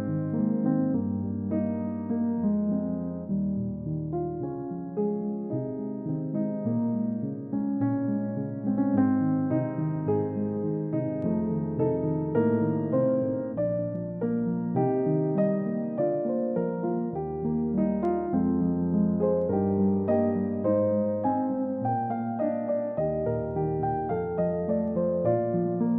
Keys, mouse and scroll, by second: 12.3 middle click, 18.7-19.0 scroll down 1, 19.0 middle click, 20.3-20.7 scroll up 1, 20.7 scroll down 1, 22.3-22.6 scroll up 1, 25.8 scroll up 1.